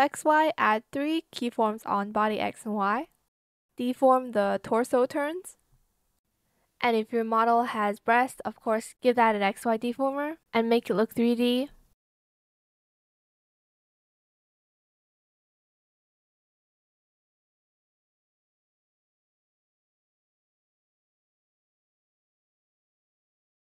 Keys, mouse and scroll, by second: 0.0 shift+click, 2.4 shift+click, 3.3 shift+click, 3.7 shift+click, 4.2 shift+click, 4.6 shift+click, 4.8 shift+click, 5.0 ctrl+shift+z, 5.0 shift+click, 6.2 shift+click, 6.3 shift+click, 6.9 shift+click, 7.1 shift+click, 8.9 shift+click, 9.5 shift+click, 10.5 shift+click, 10.8 ctrl+z, 11.7 shift+click, 12.0 shift+click, 15.0 shift+click, 15.7 shift+click, 16.0 shift+space, 16.1 click, 16.3 shift+click, 17.1 shift+click, 18.5 shift+click, 19.5 shift+click, 20.0 shift+click, 20.7 shift+click, 21.0 shift+click, 21.2 shift+click, 22.0 shift+click, 22.2 shift+click, 23.2 shift+click, 23.4 shift+click, 23.5 ctrl+z.